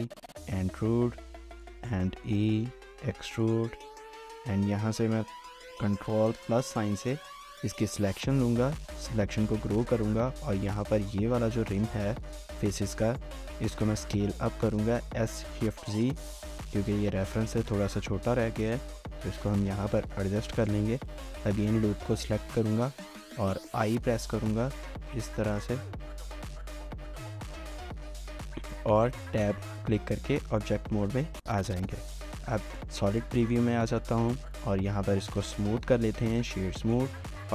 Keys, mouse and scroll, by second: 1.3-2.4 typing, 3.7 shift+middle click, 6.4 ctrl++, 13.9 typing, 15.2 typing, 19.3 shift+middle click, 20.6 alt+click, 21.1 shift+middle click, 23.6 i, 25.6-26.3 typing, 26.1 shift+middle click, 28.8 Tab, 30.2 scroll down 1, 30.6 middle click, 33.4 shift+middle click, 35.1 right click.